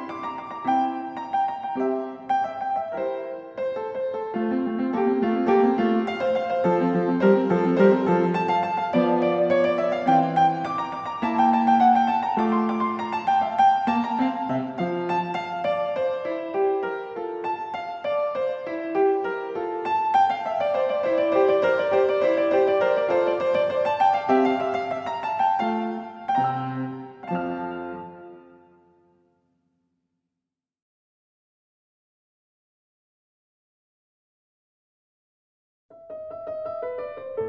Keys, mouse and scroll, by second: 0.5 s, 1.3 click, 2.2 click, 3.9 click, 4.6 click, 6.0-6.4 typing, 6.8 Return, 9.9 s, 11.8 click, 13.9 click, 15.6 click, 16.4 click, 16.8 Escape, 18.0 click, 19.2 click, 20.5 t, 22.8 ctrl+z, 24.7-25.8 drag, 25.9-27.0 drag, 27.9-28.9 drag, 31.2 s, 33.1 click, 34.0 click, 34.6 click, 35.4 typing, 36.4 Return.